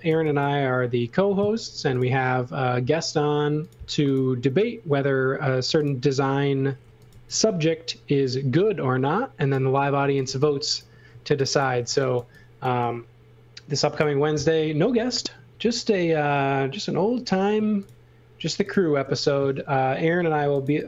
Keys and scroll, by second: 0.0-0.6 typing, 1.8 m, 6.8 x, 7.1 v, 10.0-12.1 typing, 16.2 space, 20.1-20.8 typing.